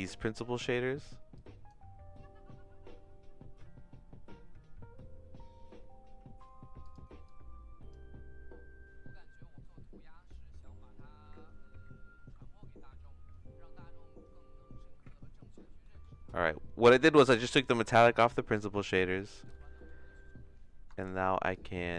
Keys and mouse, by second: 0.2 middle click, 6.1 click, 7.2 click, 15.9 middle click, 16.8 middle click, 17.9 middle click, 18.5 middle click, 18.9 middle click, 19.8 middle click, 21.0-21.9 shift+drag.